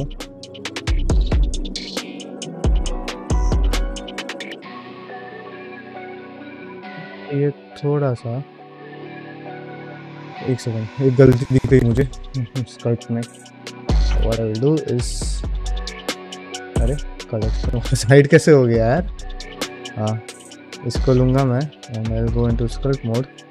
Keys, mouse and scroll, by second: 0.0-1.7 middle drag, 1.9 ctrl+middle click, 2.2-4.9 middle drag, 5.1 ctrl+Tab, 5.7 click, 6.2 middle click, 6.4 ctrl+Tab, 8.4 x, 12.8-14.7 drag, 14.7 middle click, 18.8 click, 19.8 click, 21.1 middle click, 21.4 ctrl+Tab, 22.4 ctrl+middle click, 22.8 g.